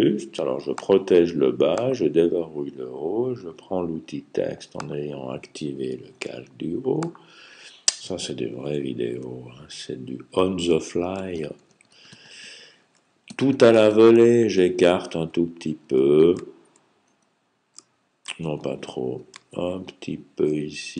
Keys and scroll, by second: 9.4 alt+Right, 9.8 alt+Right, 10.5 alt+Right, 11.2-14.0 typing, 11.7 alt+Right, 15.1-15.7 typing, 16.9 typing, 18.3-19.4 typing, 20.4-20.9 typing.